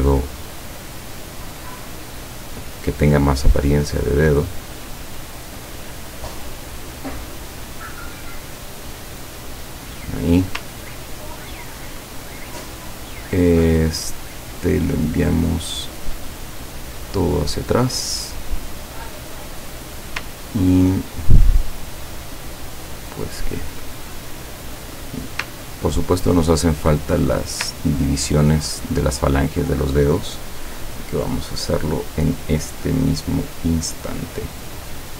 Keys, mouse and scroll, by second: 1.2 click, 3.3 click, 6.1-10.0 drag, 10.9-11.3 ctrl+scroll down 2, 12.4 ctrl+click, 13.9 click, 16.9 click, 17.7 click, 18.8 click, 19.7 click, 20.4 ctrl+scroll down 2, 22.9-23.4 ctrl+scroll up 2, 24.0 ctrl+click, 25.0 click, 25.8-26.4 ctrl+scroll down 4, 26.7 ctrl+click, 27.9-28.5 ctrl+scroll up 4, 29.2 click, 31.0 click, 31.8-33.7 drag.